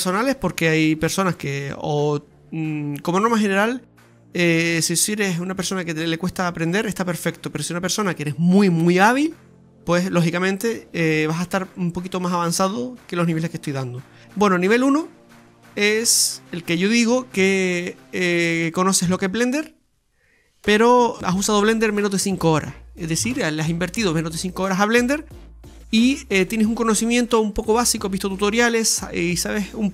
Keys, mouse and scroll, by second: 0.2 shift+right click, 0.3 middle click, 1.5 click, 3.5 KP_7, 3.9-4.4 scroll down 6, 4.5 shift+middle click, 7.4 click, 9.7-10.1 scroll up 4, 10.2 shift+middle click.